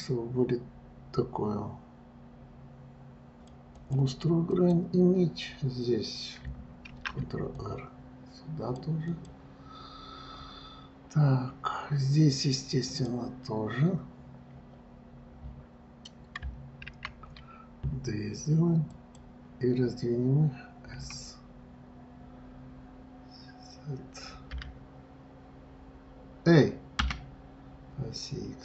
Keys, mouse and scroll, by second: 4.8 click, 11.0 scroll up 2, 13.1 click.